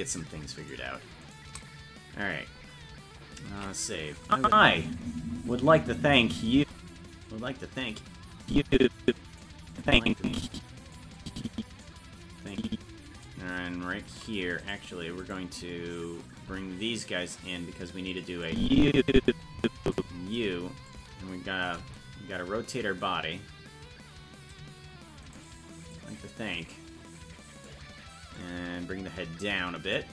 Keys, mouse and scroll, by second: 3.9 ctrl+s, 4.3 click, 4.4 space, 8.4-9.4 drag, 9.7-11.0 drag, 11.2 click, 12.5 click, 14.6-16.5 right drag, 16.5 g, 18.5-20.0 drag, 20.9-24.5 shift+drag, 25.3 right click, 25.9-27.7 drag, 28.4-30.1 drag.